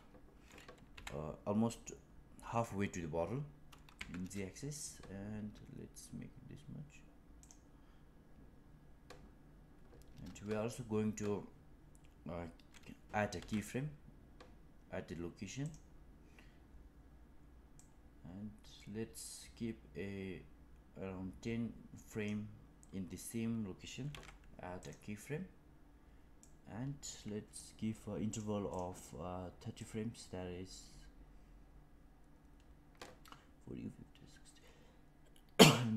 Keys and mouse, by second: 13.3 i, 17.7-22.2 drag, 24.0 i, 26.3 click, 28.2 click, 28.6 click, 28.9 click, 29.7-35.9 drag.